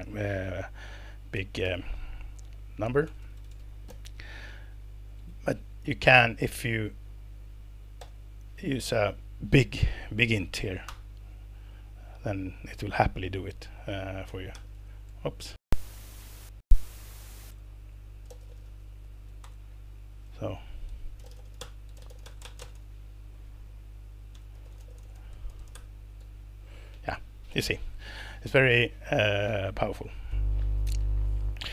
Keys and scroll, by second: 1.3-4.4 typing, 5.1 alt+Return, 8.0 shift+n, 10.8 alt+Return, 14.0-19.2 typing, 19.4 alt+Return, 20.9-23.3 typing, 24.4-26.3 typing, 29.9 Escape.